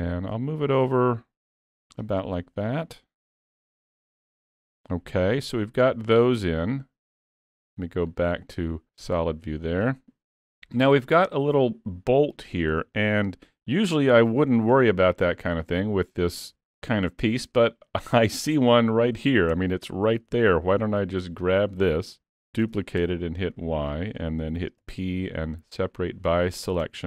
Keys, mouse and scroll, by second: 2.6 middle click, 3.3 z, 3.8 click, 4.0 scroll down 3, 4.2 alt+a, 4.3 middle click, 8.1 click, 9.2 middle click, 12.6 scroll down 3, 13.0 shift+middle click, 13.3 middle click, 14.0 scroll up 2, 18.2 click, 19.6 Tab, 20.3 alt+a, 21.1 l, 22.6 shift+d, 24.9 p, 26.8 Tab.